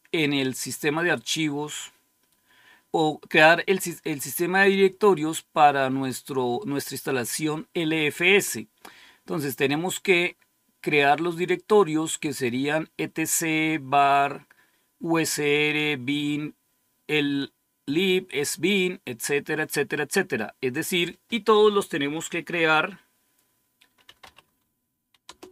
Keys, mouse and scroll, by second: 20.6 click, 23.7-24.6 typing, 25.1 Return.